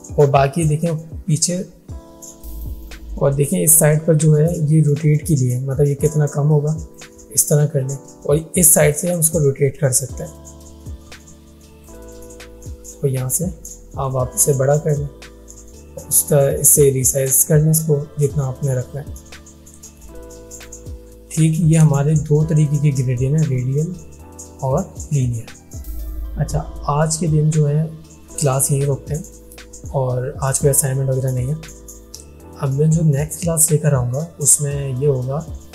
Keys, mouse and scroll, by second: 2.4 ctrl+z, 4.7-7.3 drag, 21.4 alt+scroll down 2.